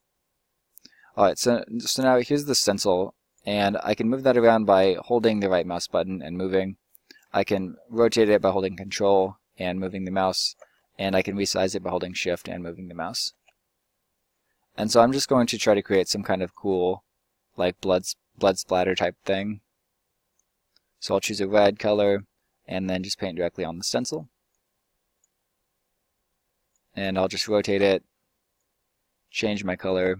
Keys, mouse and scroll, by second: 1.2 right click, 1.7 right click, 1.9 right click, 3.0 right click, 4.1 right click, 10.8 right click, 13.7 right click, 16.6 click, 19.0-24.5 drag, 22.1-24.5 middle drag, 24.5-25.3 right drag, 25.4-29.4 middle drag, 29.4-30.1 drag.